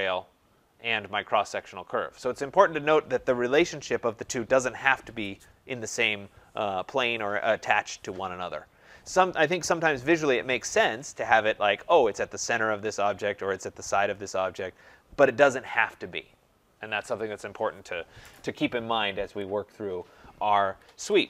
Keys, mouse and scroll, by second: 19.3 click, 20.7 Escape, 20.8 Escape, 21.0 Escape.